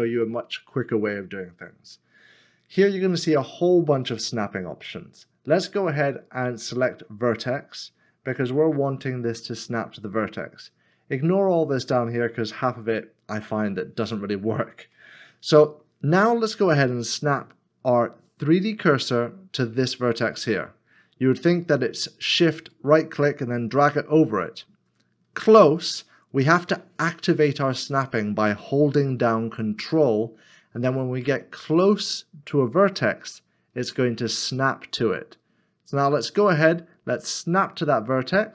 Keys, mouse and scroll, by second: 15.0 shift+right click, 15.4 middle click, 22.8 shift+right click.